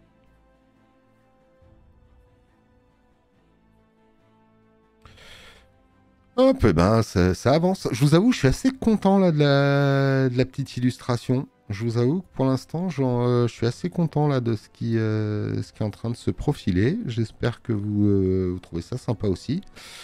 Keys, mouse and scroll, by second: 5.6 click, 5.6 space, 5.8 click, 6.0 click, 18.4 space, 18.6 click.